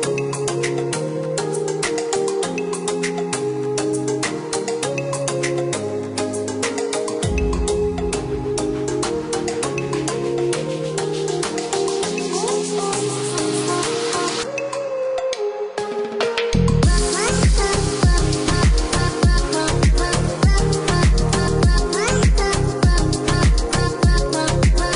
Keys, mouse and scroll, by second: 1.4 KP_0, 1.7 KP_Decimal, 2.0 KP_7, 2.7 KP_Enter, 4.6 click, 7.2 click, 8.3 click, 10.0 click, 10.8 click, 13.6 click, 15.3 click, 19.2 KP_0, 19.4 KP_Decimal, 19.8 KP_8, 20.4 KP_Enter, 24.1 click, 24.8 click.